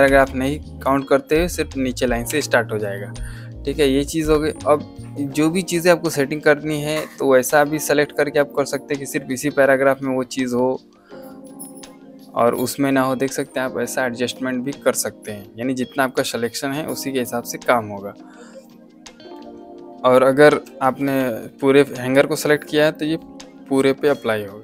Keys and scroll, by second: 0.0 End, 2.2 Delete, 20.5 Escape.